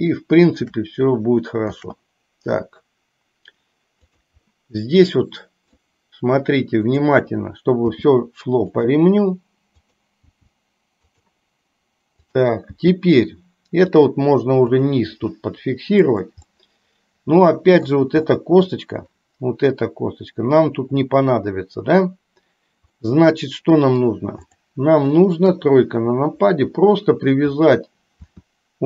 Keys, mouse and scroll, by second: 0.2 shift+middle click, 1.8 shift+d, 4.5-5.8 middle drag, 7.0 click, 8.0 g, 10.4 g, 12.3 click, 12.9 g, 15.4 g, 16.5-17.9 middle drag, 18.4 scroll up 1, 18.5 middle click, 23.0-24.0 middle drag, 25.5 KP_3, 28.4 r.